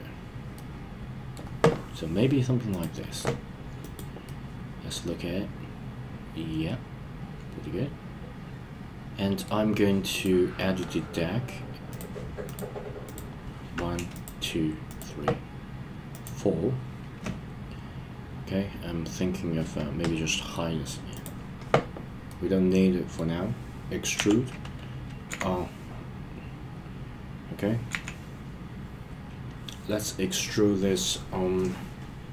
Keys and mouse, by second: 0.5-1.3 middle drag, 2.7 click, 4.2-9.5 middle drag, 11.9 click, 12.4 click, 14.1 shift+click, 16.1 shift+click, 21.1 click, 22.3-23.3 middle drag, 24.1 e, 25.3 z, 27.9 z.